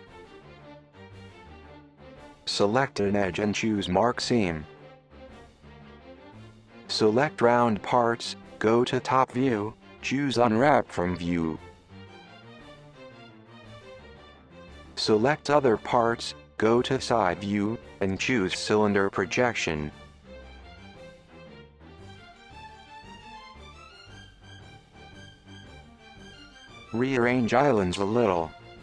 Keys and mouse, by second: 1.2 middle click, 1.9 right click, 3.5 click, 3.9 alt+click, 5.5 right click, 6.1-6.5 middle drag, 6.5 u, 16.6 KP_7, 17.5 KP_1, 20.0 u, 27.3-28.3 drag, 28.4 g.